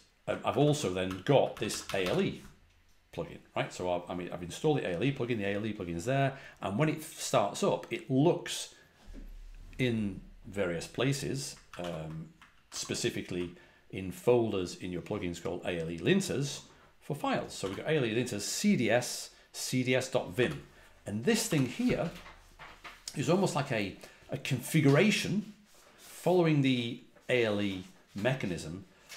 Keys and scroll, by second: 0.4 ctrl+a, 0.5 ctrl+l, 1.0-1.9 typing, 11.6 ctrl+a, 11.7 ctrl+l, 12.4 ctrl+a, 12.6 ctrl+l, 17.5 l, 21.4 l.